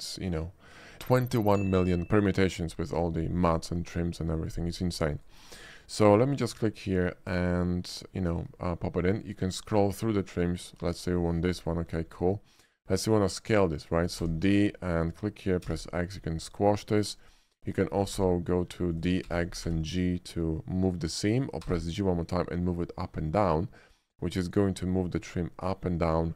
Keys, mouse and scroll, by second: 5.2 click, 6.3 click, 11.0 ctrl+click, 11.5 scroll up 1, 11.8 ctrl+middle click, 12.2 middle click, 14.3 d, 15.1 click, 15.7 x, 17.3 click, 18.1 d, 19.0 click, 19.4 x, 19.7 g, 19.9 x.